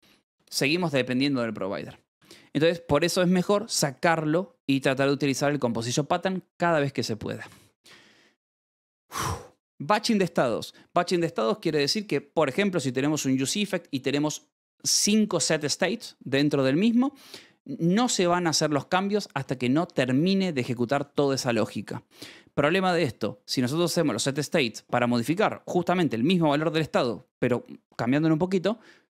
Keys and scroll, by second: 0.0 h, 0.3 Escape, 0.3 a, 2.1 shift+v, 4.9 Escape, 7.4 j, 9.1 k, 17.6 Escape, 19.3 shift+v, 19.8 Escape, 20.1 j, 20.4 shift+v, 20.8 Escape, 23.6 h, 24.5 Escape.